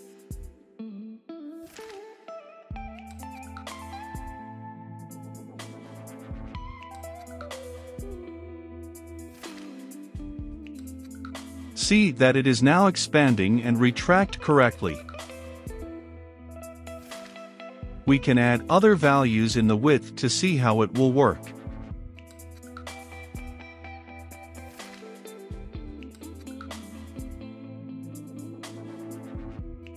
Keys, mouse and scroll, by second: 0.0-1.0 typing, 1.9-3.8 drag, 3.8 middle click, 4.3-29.9 drag.